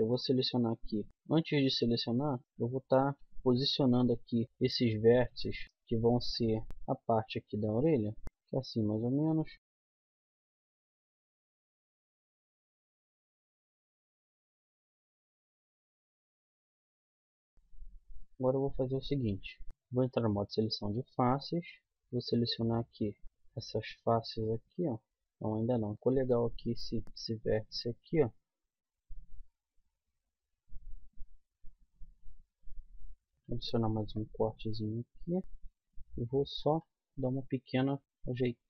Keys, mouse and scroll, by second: 1.1 z, 2.3-3.8 middle drag, 3.8 g, 4.2 click, 4.4 g, 4.9 click, 5.6 middle click, 6.7 ctrl+r, 8.8 click, 9.7-12.6 typing, 10.0 click, 12.5 click, 13.2 click, 13.5 ctrl+z, 13.6 ctrl+z, 13.9 click, 14.2-16.2 typing, 14.7 click, 15.2 click, 15.8 click, 16.6-18.1 middle drag, 17.6 z, 19.3 KP_1, 19.7 z, 21.9-25.1 middle drag, 25.5 middle click, 25.9 a, 26.2 click, 26.2 right click, 27.0 g, 28.2 click, 28.4 g, 30.0 g, 31.5 middle click, 32.1 g, 33.9 ctrl+r, 35.4 g, 36.8 g, 37.8 g, 38.4 g.